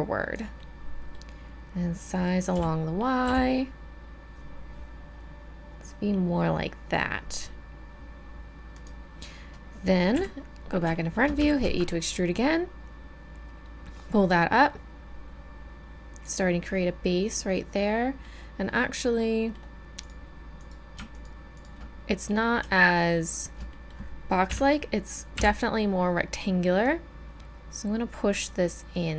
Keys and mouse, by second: 0.7 middle click, 2.5 s, 10.1 KP_1, 11.4 e, 12.3-13.5 drag, 16.7 middle click, 18.9 middle click, 19.2 middle click, 19.4 middle click, 20.6-22.4 right drag, 24.5 KP_1, 25.3 KP_7, 26.8-28.9 middle drag.